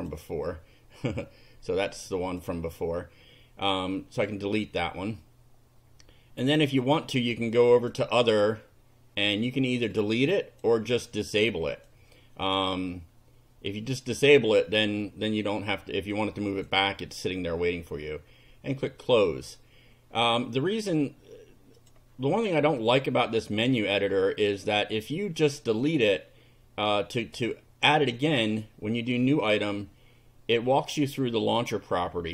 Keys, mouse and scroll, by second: 2.3 click, 9.9 click, 11.7 click, 15.7-16.9 drag, 21.8 click, 22.8 click, 26.9 click, 29.3 click.